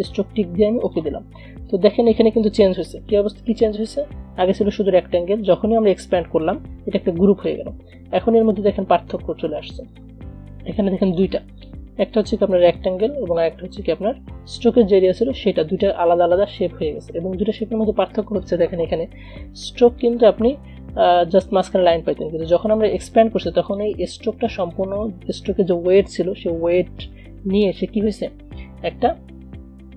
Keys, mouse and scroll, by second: 3.7 ctrl+z, 10.0 click, 15.5 click, 19.9 a, 20.2-27.5 drag, 27.5 ctrl+z.